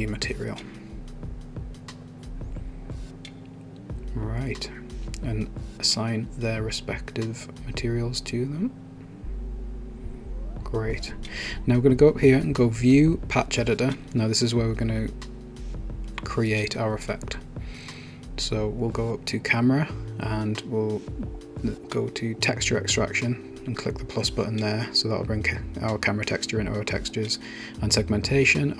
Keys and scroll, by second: 0.2-2.8 typing.